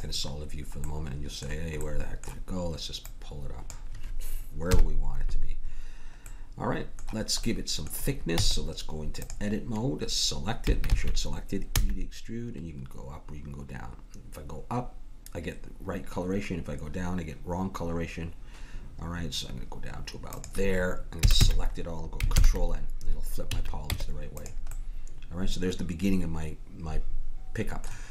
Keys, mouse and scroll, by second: 3.0-4.6 drag, 4.6 KP_1, 8.3 Tab, 10.6 a, 10.9 a, 11.7 e, 21.2 a, 21.4 a, 22.4 ctrl+n, 23.5 a, 23.9 Tab.